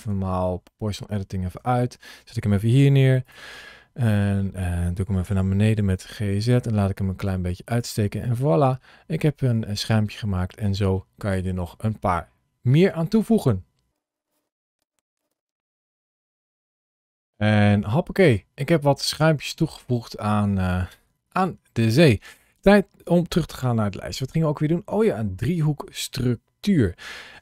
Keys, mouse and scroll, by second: 0.5 middle click, 1.4 KP_7, 2.6 g, 3.1 click, 3.3 middle click, 4.2-4.8 scroll down 2, 5.1 g, 5.5 z, 7.5 click, 8.0 middle click, 14.4-17.1 typing, 14.7 right click, 15.1 click, 15.7 click, 16.4 click, 16.4 middle click, 17.0 alt+a, 17.1 click, 17.5 Tab, 18.0 middle click.